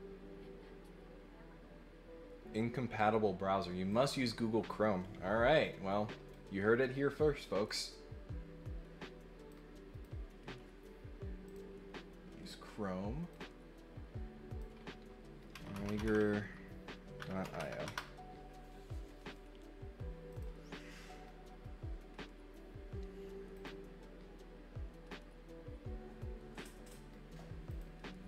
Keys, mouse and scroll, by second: 3.9 click, 6.3-7.6 drag, 9.5 click, 11.4 click, 13.3-14.5 drag, 20.3 click, 23.5 click, 27.6 click.